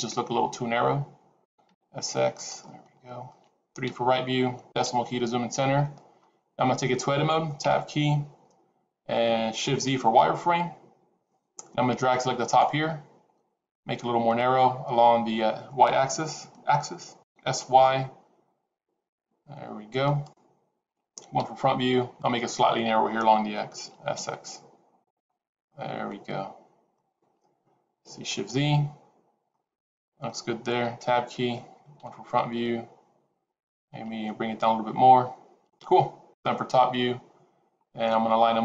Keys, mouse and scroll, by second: 1.6 s, 2.6 middle click, 3.7 KP_3, 4.7 KP_Decimal, 7.5 Tab, 10.5 shift+z, 11.8 click, 17.1 s, 21.3 KP_1, 23.8 s, 25.4-25.8 scroll down 4, 25.6 middle click, 28.4 shift+z, 29.4 middle click, 30.9 Tab, 31.8 KP_1, 33.9 g, 36.2 KP_7, 37.6-38.1 scroll down 3.